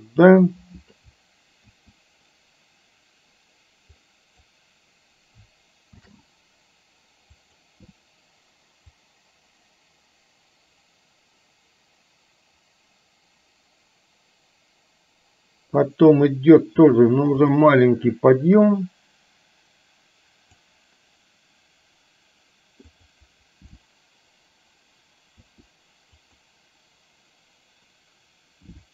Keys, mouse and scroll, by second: 1.8 a, 4.1-4.6 drag, 6.2 shift+d, 9.1-15.9 drag, 18.7 click, 19.1-20.7 drag, 22.9 click, 25.6 r.